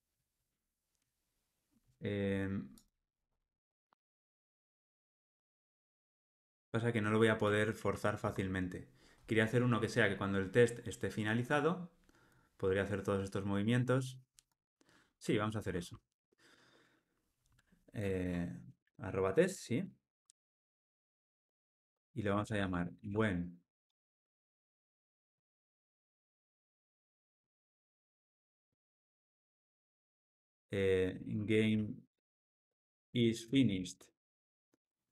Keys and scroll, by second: 7.4 super+z, 19.4 Tab, 21.1 alt+super+l.